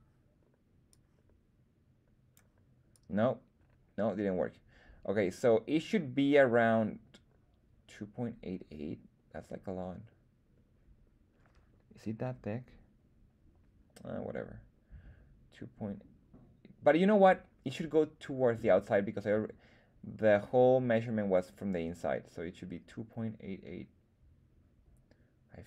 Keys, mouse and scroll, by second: 0.8-2.3 drag, 2.8-25.6 drag, 5.9 l.